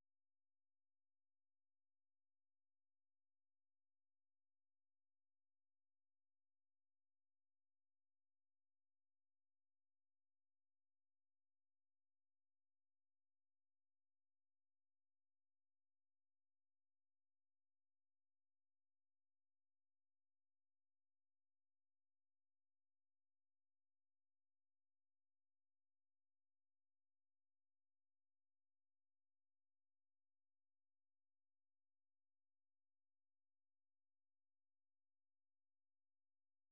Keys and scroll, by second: 3.0 ctrl+c, 3.6 alt+Tab, 4.2 ctrl+v, 4.9 Return, 12.6 Up, 13.6 Up, 14.4 Return, 19.0 ctrl+x, 19.5-24.9 typing, 26.5 Escape, 27.2 alt+Tab, 28.6 F6, 28.9-36.2 typing.